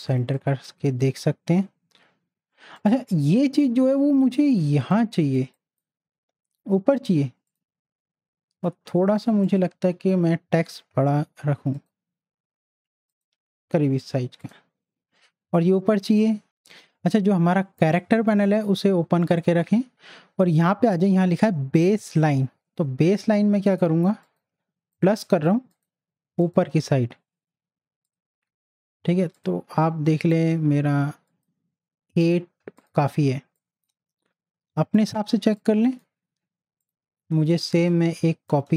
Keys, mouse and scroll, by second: 0.1 space, 0.3 click, 0.7 space, 2.7 click, 4.6 z, 4.9 click, 5.3 space, 5.5 click, 9.0 t, 9.5 click, 10.0 ctrl+a, 11.8 click, 18.4-21.5 drag, 23.6 click, 33.2 space, 33.6 click, 33.7 space, 35.3 space, 35.6 click, 35.8 space, 36.8 click, 38.7 space.